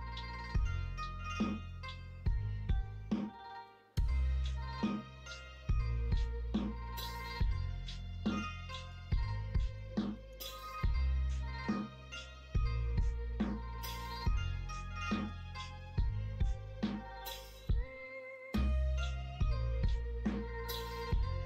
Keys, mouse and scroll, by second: 0.2 middle click, 1.4 scroll up 1, 1.7-2.2 scroll down 1, 2.2-4.4 middle drag, 4.6 scroll up 1, 4.8 shift+middle click, 5.3 scroll up 1, 5.5 middle click, 6.0 scroll up 1, 6.2 middle click, 6.7-8.2 scroll up 1, 8.2 middle click, 8.9 scroll up 1, 9.1 shift+middle click, 9.5 middle click, 9.9 scroll up 1, 10.1 scroll down 1, 10.4-10.8 scroll up 1, 10.8 scroll down 1, 11.1-12.9 scroll up 1, 12.9-13.4 scroll up 1, 13.9-14.3 scroll up 2, 14.8-15.8 scroll up 2, 15.8-16.4 scroll down 2, 16.4-17.7 scroll up 2, 17.7 scroll down 1, 18.2 scroll up 1, 18.3-18.7 scroll down 1, 18.7-19.7 scroll up 1, 20.8-21.4 scroll up 1.